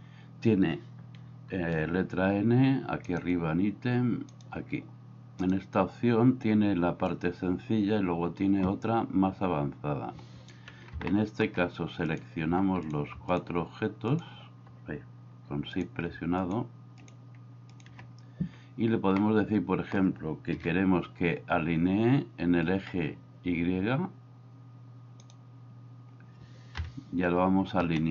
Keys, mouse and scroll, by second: 1.7 n, 11.2 middle click, 14.1 right click, 19.3 middle click, 20.6 KP_7, 26.8 KP_1.